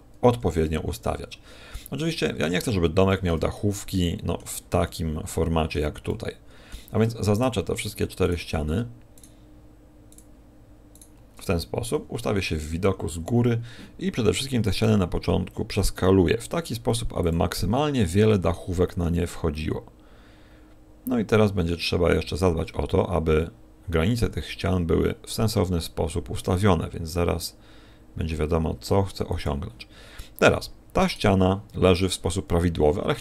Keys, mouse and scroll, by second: 0.1 KP_1, 0.5 KP_7, 1.7-2.2 scroll up 6, 2.5 shift+middle click, 3.5 middle click, 4.8 middle click, 6.0 middle click, 7.3 shift+right click, 8.2 right click, 9.1 shift+right click, 10.1 shift+right click, 10.9 shift+right click, 11.9 KP_7, 12.5 KP_7, 14.9 s, 18.0 click, 18.0 g, 29.7 click, 31.1 right click, 33.0 a.